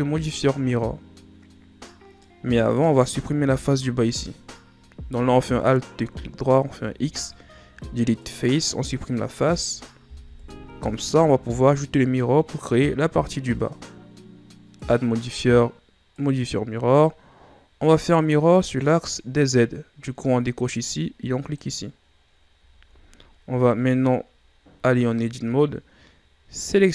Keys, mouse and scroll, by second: 2.1-2.9 middle drag, 2.9 scroll up 1, 3.4 Tab, 5.4 alt+right click, 6.6 x, 10.2 KP_1, 10.7 Tab, 11.3-13.7 scroll down 3, 14.7 click, 16.2-17.7 drag, 20.6 click, 21.4 click, 22.2-22.7 scroll down 3, 23.1-23.4 scroll up 1, 23.4 Tab, 24.8 a.